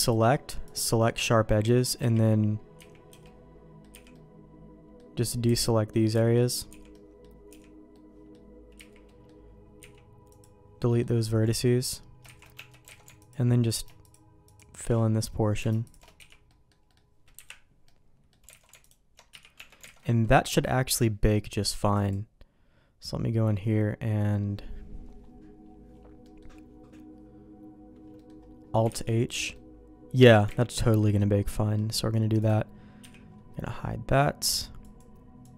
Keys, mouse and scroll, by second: 0.1 click, 2.0 KP_3, 2.8 z, 3.1 b, 3.9 b, 5.5 b, 6.1 b, 6.7 b, 7.5 b, 8.7 z, 9.1 middle click, 9.8 x, 10.9 middle click, 11.5 ctrl+z, 12.2 ctrl+shift+z, 12.5 Tab, 12.9 alt+a, 13.3 alt+click, 14.1 alt+shift+click, 15.8 alt+shift+click, 16.2 f, 16.5 middle click, 16.9 middle click, 17.3 KP_Decimal, 17.9 middle click, 18.5 alt+a, 18.8 alt+click, 19.3 f, 19.6 Tab, 19.9 alt+a, 20.0 middle click, 20.7 middle click, 21.9 click, 26.2 middle click, 28.2 middle click, 28.9 alt+h, 29.5 middle click, 30.9 ctrl+z, 31.0 middle click, 31.7 middle click, 32.4 click, 33.0 h, 34.8 click, 35.4 click.